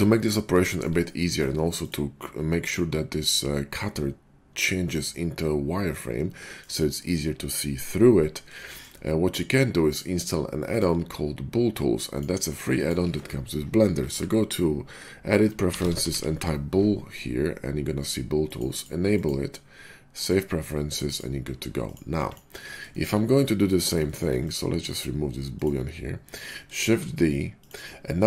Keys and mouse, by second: 6.6-8.4 drag, 8.4-9.8 shift+middle drag, 21.8-25.5 middle drag, 22.0 x, 26.6 shift+click, 26.8 shift+d, 27.7-28.2 middle drag.